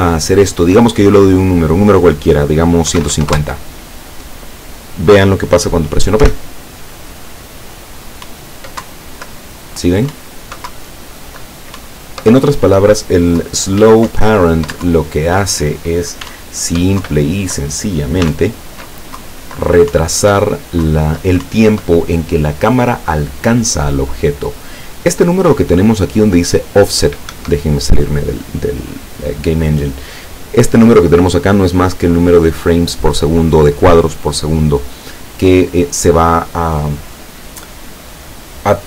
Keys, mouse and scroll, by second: 0.7 click, 2.9 KP_1, 3.0 KP_5, 3.2 KP_0, 3.3 KP_Enter, 6.3 p, 8.4 Up, 8.9 Down, 10.2 Up, 10.8 Down, 11.9 Up, 13.5 Down, 13.9 w, 14.2 Up, 15.0 Down, 16.3 s, 17.1 Down, 18.3 s, 18.4 Up, 19.3 Down, 20.0 Up, 20.9 Down, 21.5 Up, 27.4 Escape.